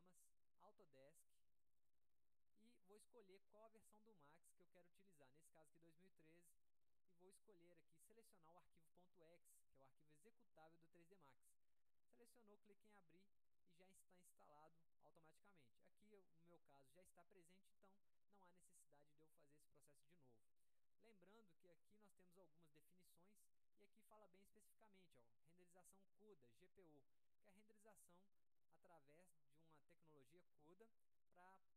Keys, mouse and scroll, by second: 1.6 click, 5.7 click, 6.6-7.4 scroll down 4, 8.8 scroll up 2, 11.1 click, 15.7 click, 24.1 click.